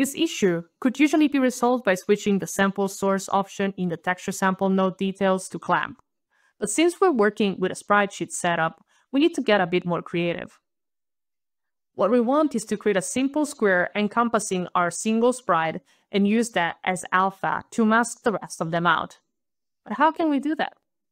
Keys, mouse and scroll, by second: 0.5 alt+click, 1.7 alt+right click, 2.7-3.5 alt+scroll down 5, 4.2 alt+right click, 7.7 alt+click, 9.4 alt+click, 9.8 alt+click, 10.5 alt+click, 11.0 alt+middle click, 11.2 alt+click.